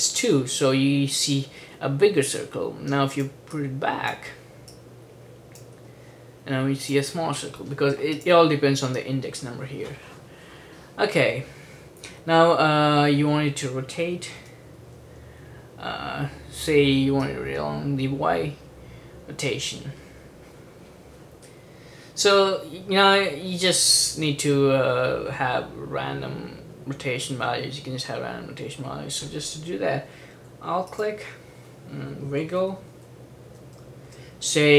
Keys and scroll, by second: 14.5 r, 32.1-34.7 typing.